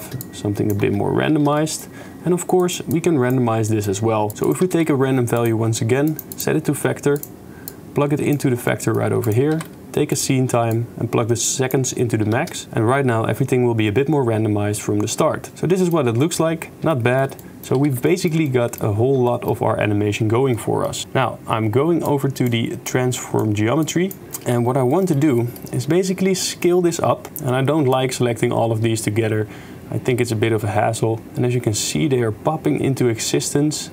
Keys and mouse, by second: 0.0 shift+space, 0.2 shift+click, 0.8 shift+space, 1.4 shift+space, 1.6 click, 2.7 click, 3.1 click, 3.7 click, 4.3 click, 4.3 shift+space, 4.3 x, 4.4 click, 4.7 shift+d, 6.0 click, 6.5-7.4 drag, 7.7-8.3 drag, 8.6 click, 9.2 click, 9.5 shift+d, 10.7-11.7 drag, 12.4 shift+space, 15.5 shift+space, 15.8 click, 16.9 shift+middle click, 17.4 middle drag, 17.8 ctrl+s, 18.0 shift+middle drag, 18.5 middle click, 19.3 shift+click, 20.5 middle click, 22.0 click, 23.0 click, 23.8-24.2 drag, 24.2 g, 24.4 middle click, 24.9 middle click, 25.3 middle click, 26.5 middle click, 28.0-31.7 shift+drag, 33.6 shift+middle click.